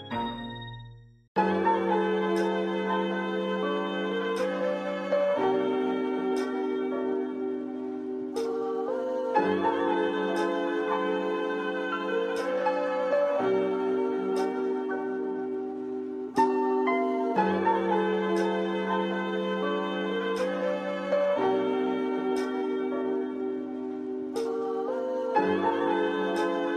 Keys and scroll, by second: 8.5 space.